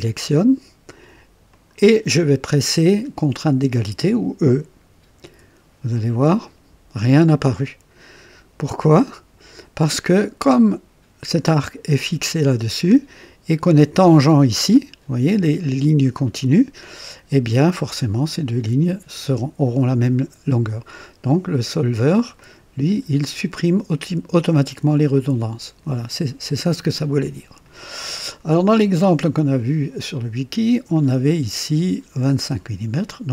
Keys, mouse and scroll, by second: 1.5 click, 5.2 e, 22.3 click, 25.1 click, 30.9 click, 33.1 click.